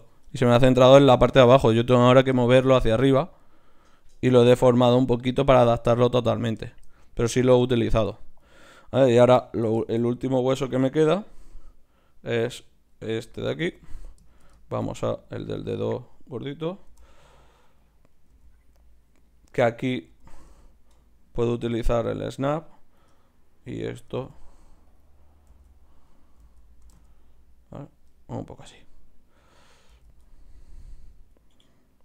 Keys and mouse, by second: 2.4-9.0 middle drag, 9.0-11.3 drag, 14.8 shift+d, 16.9 g, 18.0 click, 18.3 g, 20.1 g, 22.6-24.9 drag, 24.1 g, 25.5 z, 26.1-27.3 drag, 26.4 z, 26.8 g, 30.1 z.